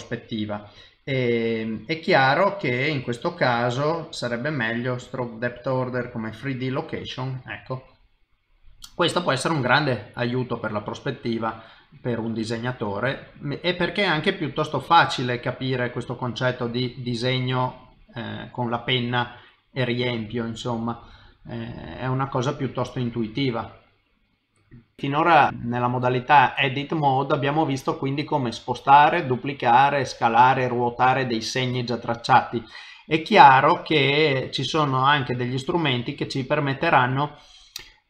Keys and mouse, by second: 1.1 click, 4.0 click, 4.0 middle click, 5.0 click, 6.9 middle click, 8.8 middle click, 13.0 middle click, 15.0 middle click, 16.0 middle click, 16.9 middle click, 17.7 middle click, 18.7 middle click, 21.2 middle click, 23.1 middle click.